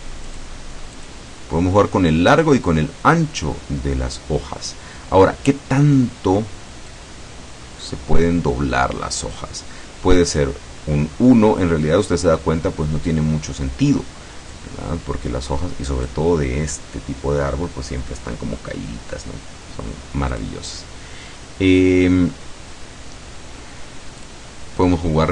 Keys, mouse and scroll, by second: 0.3 click, 1.0 click, 4.4-4.8 scroll down 1, 5.2 scroll down 1, 7.0-9.6 drag, 14.6-16.4 drag, 20.4 click, 24.3 click.